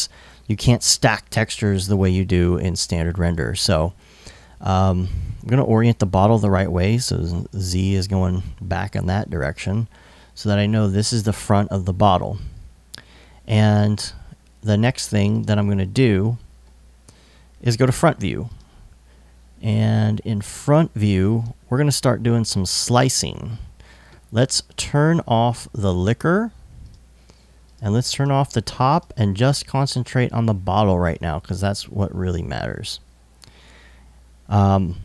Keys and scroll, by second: 19.9 i.